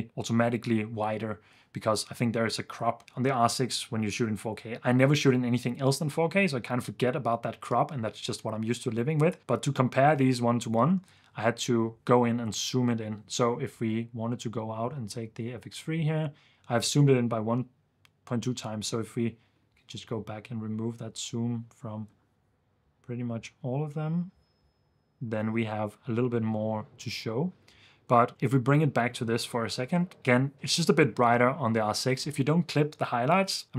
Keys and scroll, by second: 10.9 ⟲, 28.1 2, 28.5 super+s.